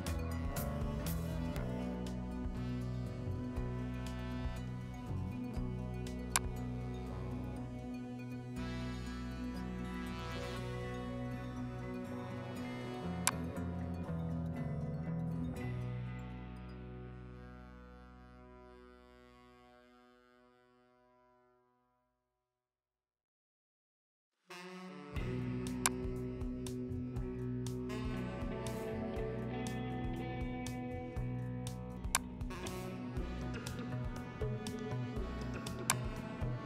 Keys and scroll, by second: 11.0 ctrl+z, 15.4 ctrl+t, 16.8 Down, 17.0 Down, 17.2 Down, 17.4 Down, 17.5 Down, 17.7 Down, 17.8 Down, 18.0 Down, 18.2 Down, 19.5 Up, 20.5 Up, 21.5 Return.